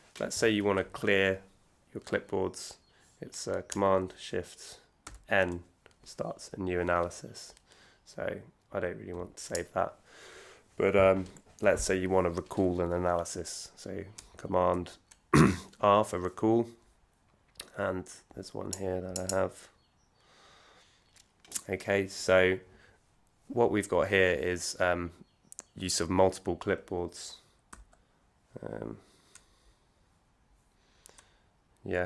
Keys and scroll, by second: 5.0 shift+super+n, 14.7 super+r.